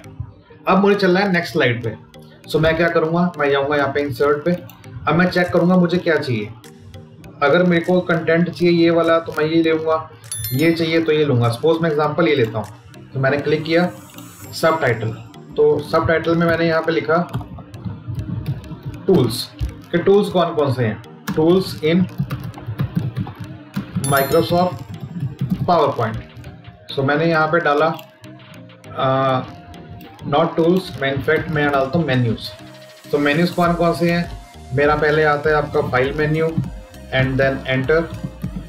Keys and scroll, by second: 21.1 space, 21.5 space, 23.5 space.